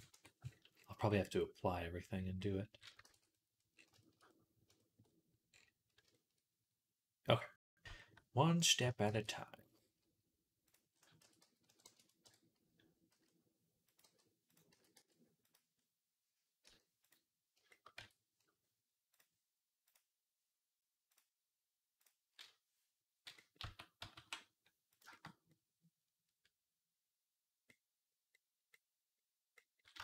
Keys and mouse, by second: 2.9 ctrl+s, 3.7 shift+click, 4.2-6.1 drag, 7.5 click, 8.9 shift+a, 10.8-15.6 middle drag, 11.0 r, 12.1 KP_1, 12.9 s, 13.9 g, 14.6 s, 16.5 g, 17.5 shift+middle click, 17.8 Tab, 19.0 click, 19.8-20.9 middle drag, 20.9-23.2 drag, 23.2-30.0 middle drag, 23.4 a, 24.0 e.